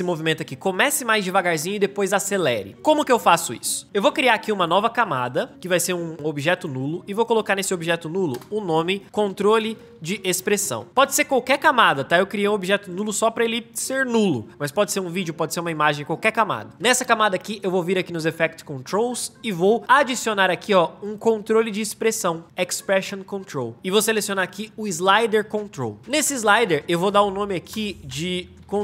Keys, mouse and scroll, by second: 8.2 Return, 8.8-11.0 typing, 27.6 Return, 28.0-28.8 typing.